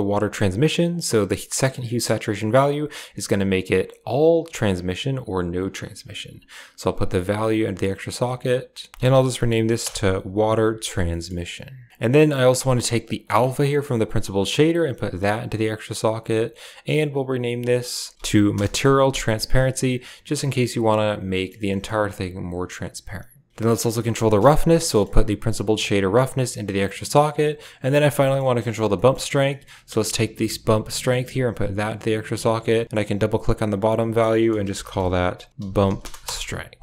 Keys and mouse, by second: 0.8 click, 0.8 click, 2.2-5.5 drag, 4.1 typing, 6.7 click, 8.8 click, 8.9 click, 8.9 s, 11.0 middle click, 12.1 middle click, 12.6 middle click, 13.3 middle click, 14.5-15.6 drag, 17.1 click, 17.2-18.5 drag, 21.2 middle click, 21.6 middle click, 23.6 right click, 23.8 middle click, 24.8 middle click, 25.8-27.1 drag, 28.1 middle drag, 28.5 middle drag, 28.8 middle click, 29.4 middle click, 31.0 click, 31.2-31.7 drag, 32.8 click, 33.0-36.2 drag.